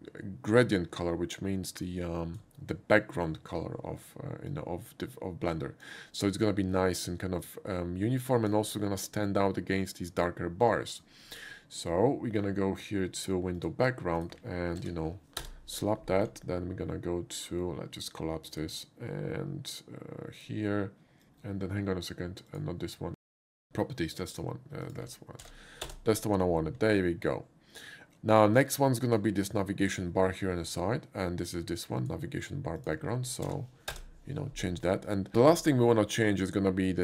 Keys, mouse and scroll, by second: 1.9 click, 4.5-5.9 drag, 7.5-8.5 drag, 10.2 click, 13.6 click, 14.2 click, 14.8 ctrl+v, 15.4 Return, 18.6 click, 20.4 click, 21.2 ctrl+v, 21.2 Return, 22.5 click, 24.3 click, 24.9 click, 25.4 ctrl+v, 25.8 Return, 26.0 ctrl+v, 28.6 click, 32.0 click, 32.8 click, 33.2 ctrl+c, 33.2 click, 33.3 ctrl+v, 33.8 Return, 33.9 ctrl+v, 35.1 click, 35.3 click.